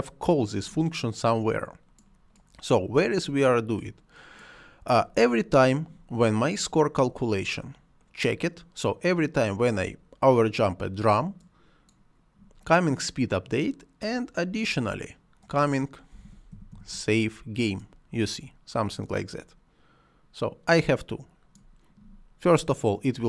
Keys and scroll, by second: 15.7-17.1 typing.